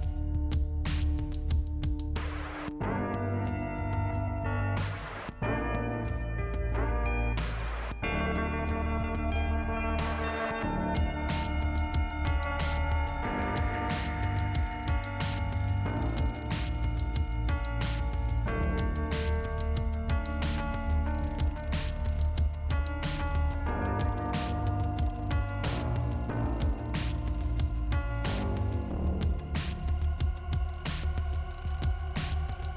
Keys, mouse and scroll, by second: 1.2 click, 1.3 click, 2.3 click, 3.5 click, 3.6 click, 4.0 scroll down 2, 6.6 click, 10.4 click, 17.3 click, 24.6 click, 25.1 click, 26.2 click, 31.0 click, 31.1 click, 31.4 click, 31.5 double click.